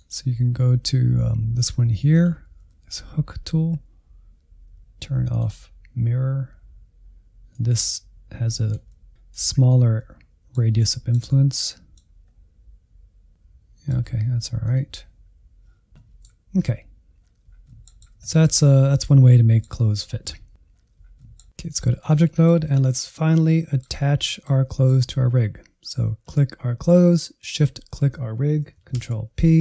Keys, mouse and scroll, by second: 0.2-2.1 scroll down 6, 2.1 click, 2.6-5.3 shift+middle drag, 5.3-8.8 drag, 8.8 middle click, 9.6 click, 9.9-11.8 middle drag, 11.8 click, 12.3 scroll down 1, 12.4-14.6 middle drag, 14.6 click, 15.6 middle click, 15.8 scroll down 6, 16.0 middle click, 16.3 /, 16.6 scroll down 5, 16.9 middle click, 17.6 middle click, 18.3 scroll up 1, 18.6-29.6 middle drag.